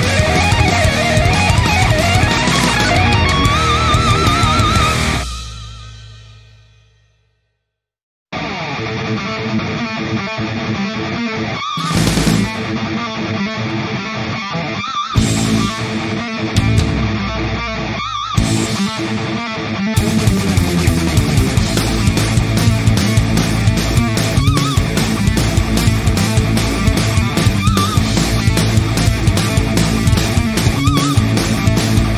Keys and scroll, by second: 1.0 ctrl+0, 4.6 b, 12.3-13.4 typing, 15.6 ctrl+z, 17.7 ctrl+j, 20.5 i, 22.6 alt+BackSpace, 23.9 ctrl+z, 27.5 alt+BackSpace, 29.0 ctrl+[, 31.9 ctrl+d.